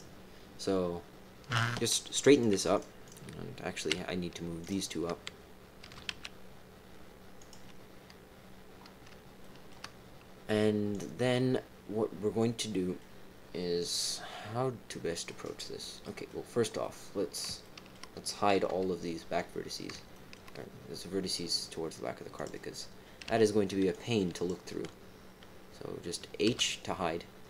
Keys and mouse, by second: 1.9 click, 2.3 click, 2.7 click, 3.0 click, 4.6 shift+click, 5.8 g, 9.4 shift+click, 10.9 click, 12.5 click, 14.0-15.2 drag, 16.0 middle click, 16.8 middle click, 17.6 shift+middle click, 18.6 KP_3, 20.1 shift+middle click, 23.2 b, 26.4 h.